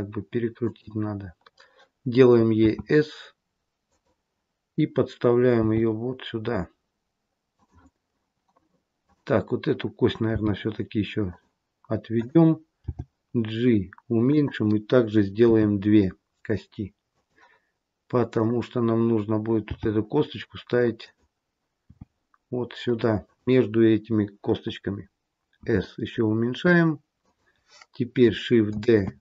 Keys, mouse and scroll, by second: 5.5 g, 9.0 click, 10.3 g, 12.1 click, 12.8 g, 15.4 e, 18.3 click, 19.5 g, 21.8 r, 28.7 shift+d.